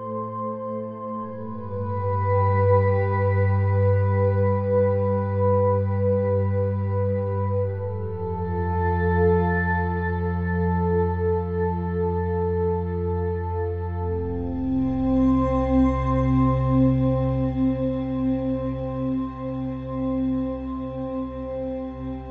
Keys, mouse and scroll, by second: 1.3 a, 2.3-4.3 drag, 3.3 a, 4.4-6.6 middle drag, 5.5 Tab, 6.6 KP_1, 8.3 r, 17.9 middle click, 21.1-22.3 middle drag.